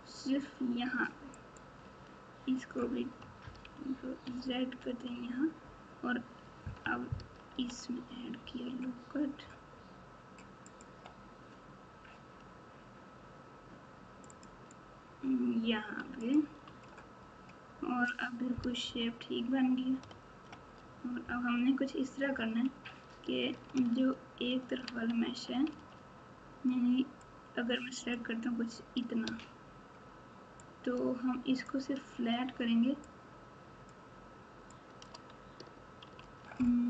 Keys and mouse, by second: 3.7 ctrl+z, 4.2 ctrl+z, 7.5 ctrl+r, 14.3 click, 14.3 right click, 16.6 Tab, 18.8 KP_1, 20.0 KP_Subtract, 20.7 Tab, 23.6 z, 24.8 alt+z, 25.6 alt+z, 27.2 click, 27.4 click, 30.7 shift+click, 33.0 click, 33.2 click, 34.8 click, 36.2 alt+z.